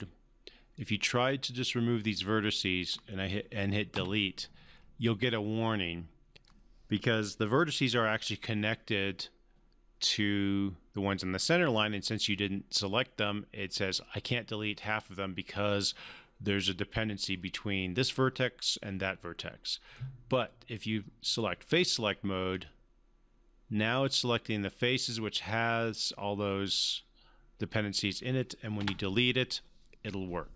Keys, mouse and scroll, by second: 0.7-2.0 drag, 3.9 Delete, 5.0 Delete, 19.9-21.5 right drag, 22.5-24.4 drag, 28.8 Delete.